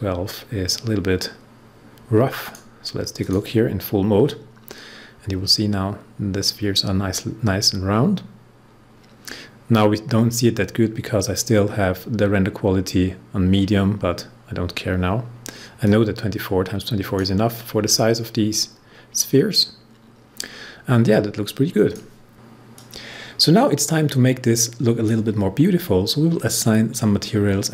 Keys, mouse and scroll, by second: 2.3 click, 5.8 scroll up 1, 9.1-9.6 scroll down 1, 9.6 scroll up 1, 14.7-15.8 scroll down 1, 15.8-22.3 drag, 22.7-27.5 drag.